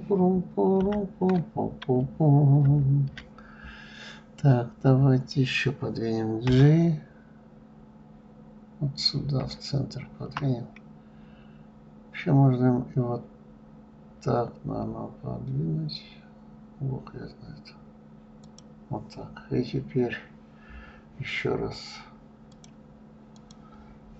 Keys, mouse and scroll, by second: 4.1-6.9 scroll up 1, 6.9 g, 22.9 click, 23.8-24.1 drag.